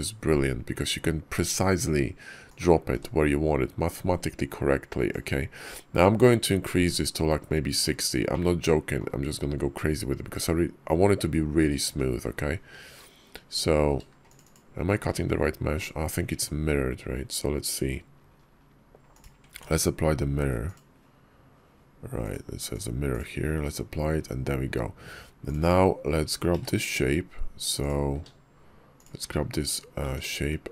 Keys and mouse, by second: 2.3-14.5 ctrl+drag, 19.0 click, 19.4 ctrl+`, 24.1 KP_5, 26.4 q, 28.0 q.